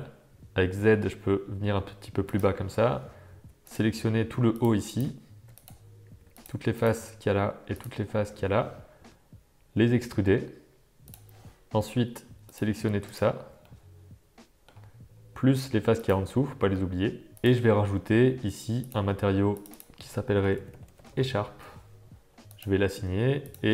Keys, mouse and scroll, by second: 0.4 g, 4.8 shift+click, 5.5 click, 6.3 shift+click, 6.7 shift+click, 8.9 e, 12.4 shift+click, 13.6-14.6 middle drag, 15.9 shift+click, 16.7 middle click, 19.0 click, 19.7-22.0 drag, 22.5 click, 23.4 click.